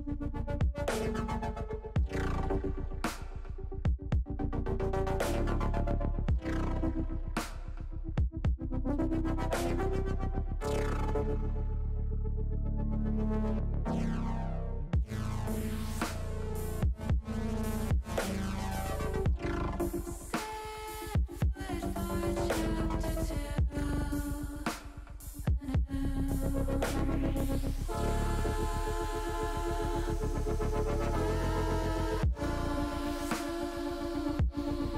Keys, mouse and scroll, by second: 0.8 s, 2.2 click, 3.3 middle click, 4.2 click, 5.8-7.1 drag, 7.4 middle click, 8.5 middle click, 10.0 middle click, 12.9 alt+shift+click, 13.8 click, 14.8 click, 15.2 click, 15.8 alt+shift+click, 16.7 alt+shift+click, 17.5 alt+shift+click, 18.5 alt+shift+click, 19.5 click, 23.6 alt+shift+click, 24.5 alt+shift+click, 25.3 alt+shift+click, 26.5 alt+shift+click, 27.1 middle click, 28.1-29.4 drag, 29.8-32.0 middle drag, 32.6 ctrl+z, 33.7 click.